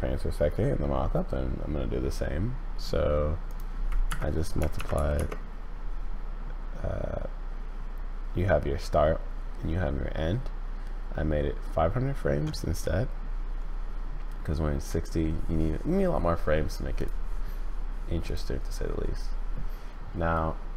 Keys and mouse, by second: 3.5-5.7 middle drag, 17.0 click, 18.2 click.